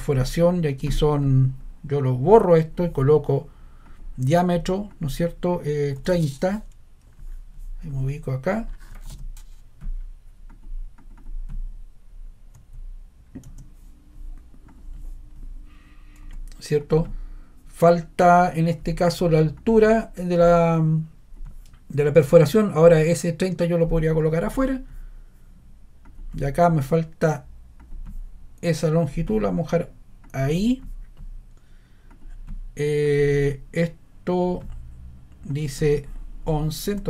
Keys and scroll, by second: 5.7-6.6 typing, 8.6-9.6 typing, 12.5 3, 13.4 0, 16.2 Escape, 36.8 ⟲.